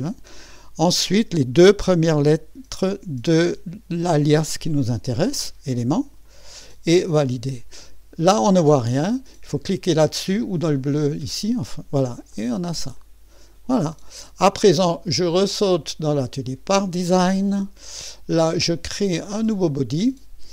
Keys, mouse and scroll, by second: 0.0 click, 6.0-6.7 typing, 6.2 click, 7.2 click, 10.7 click, 12.3 click, 13.0-14.5 drag, 15.6 click, 16.2-20.5 drag.